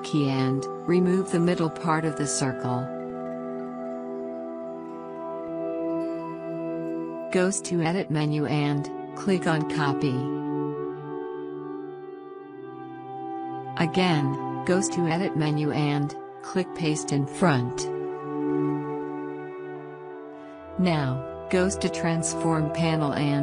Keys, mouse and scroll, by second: 1.3 alt+click, 8.4 click, 10.8 click, 15.4 click, 18.0 click, 22.1 click.